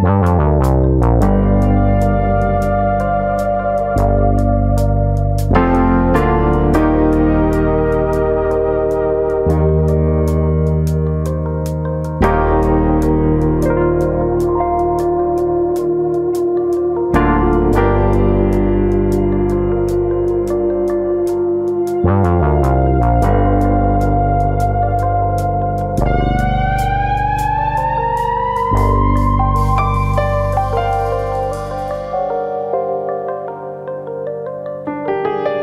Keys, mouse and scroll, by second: 0.1 middle click, 0.5 scroll up 1, 0.7 middle click, 2.0 alt+click, 2.8 ctrl+e, 4.2 shift+middle click, 4.4 middle click, 4.8 shift+middle click, 5.1 scroll up 1, 6.1 2, 6.6 click, 7.1 alt+shift+click, 7.9 click, 7.9 middle click, 8.3 shift+middle click, 8.8 middle click, 9.0 scroll up 1, 9.2 shift+middle click, 9.7 alt+shift+click, 11.2 middle click, 11.6 shift+middle click, 11.8-12.8 scroll up 3, 12.1 middle click, 12.8 alt+shift+click, 13.6 middle click, 14.2 alt+shift+click, 15.3 alt+shift+click, 15.3 middle click, 15.6 scroll up 1, 16.0 alt+shift+click, 18.0 scroll down 2, 18.2 shift+middle click, 18.5 middle click, 19.2 alt+shift+click, 19.6 middle click, 20.2 scroll up 1, 20.5 middle click, 23.2 alt+shift+click, 28.0 alt+shift+click, 29.3 middle click, 30.2-31.1 scroll up 2, 30.4 middle click, 31.1 alt+shift+click, 31.5 shift+middle click, 32.1 alt+shift+click, 34.2 shift+middle click, 34.7 alt+shift+click, 35.0 shift+middle click.